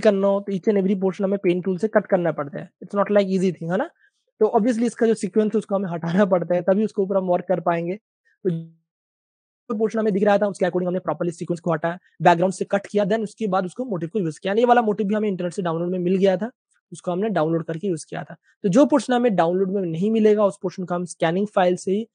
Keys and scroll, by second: 0.0-0.7 typing, 3.8 super+d, 6.8 super+space, 9.8 super+space, 11.3 typing, 17.5 super+d.